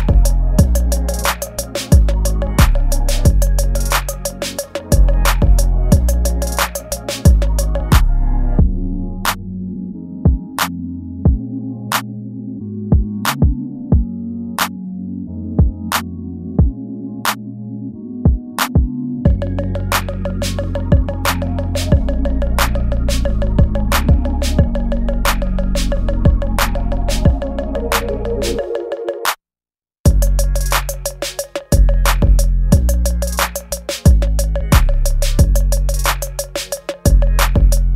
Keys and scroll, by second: 0.3 ctrl+z, 1.1 space, 1.5 ctrl+z, 1.9 ctrl+z, 2.4 space, 2.9 ctrl+z, 3.1 space, 4.2 ctrl+z, 4.9 ctrl+z, 5.6-8.9 typing, 9.1 ctrl+z, 14.4 space, 16.4 ctrl+s, 18.8 space, 20.4 space, 22.5 space, 25.5 ctrl+s, 26.2 space, 28.8 space, 29.9 space, 31.2 ctrl+z, 31.6 ctrl+z, 32.8 space, 35.7 ctrl+z.